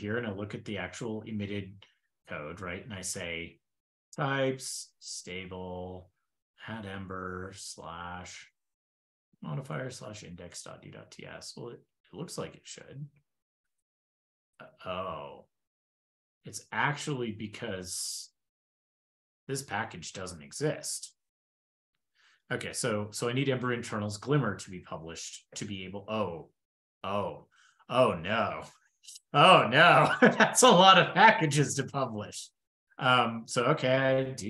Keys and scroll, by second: 15.0 super+Tab, 18.7 super+Tab, 23.0 super+c, 23.6 shift+super+[, 24.5 super+f, 24.7 super+v.